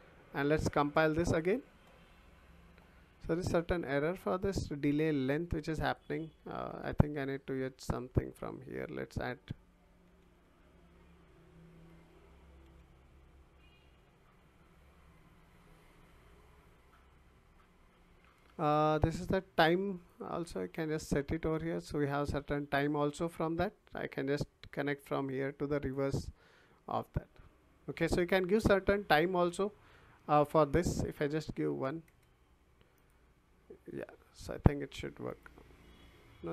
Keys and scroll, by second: 6.7 Delete, 10.1 d, 10.4 e, 12.6 l, 31.7 1, 32.0 Return.